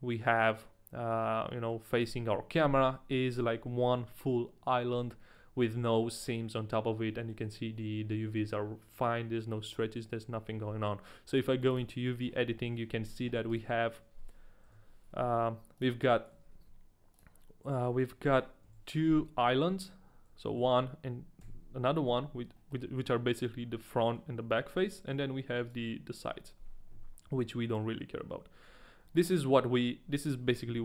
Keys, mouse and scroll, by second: 1.3 scroll down 1, 1.5 middle click, 1.7 scroll up 1, 7.1 middle click.